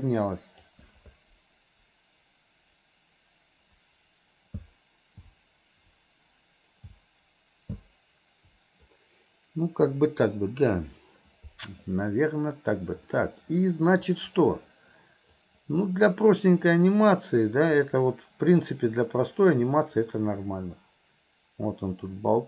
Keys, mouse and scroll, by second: 13.5-14.1 middle drag, 15.4-22.4 drag.